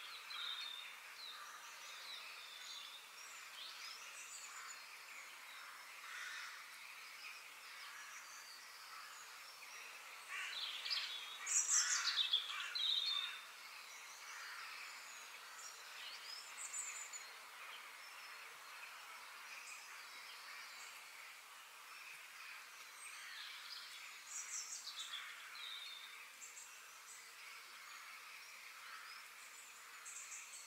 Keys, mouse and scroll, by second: 0.0-1.6 middle drag, 1.6 click, 2.1-2.5 scroll down 2, 2.5 click, 2.9 shift+click, 3.3-3.8 middle drag, 3.8 shift+click, 4.4 shift+click, 4.8 shift+click, 5.4-5.8 scroll down 3, 5.8 shift+middle click, 6.7 g, 8.8 g, 11.3-12.9 middle drag, 12.9 click, 13.3 shift+middle click, 14.1-14.5 scroll up 2, 14.5-17.8 shift+middle drag, 18.5 click, 19.1 f, 20.5-22.4 middle drag.